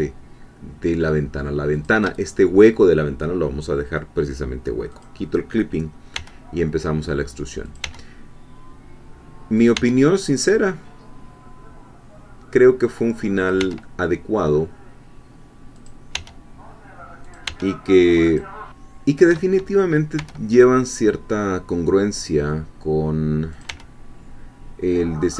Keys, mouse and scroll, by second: 1.7 shift+click, 4.9 click, 6.2 e, 7.6 click, 7.8 e, 9.6 click, 9.8 e, 13.4 click, 13.6 e, 15.8 click, 16.2 e, 17.3 click, 17.5 e, 18.3 click, 18.7-19.8 shift+middle drag, 20.2 e, 23.6 click, 23.7 e.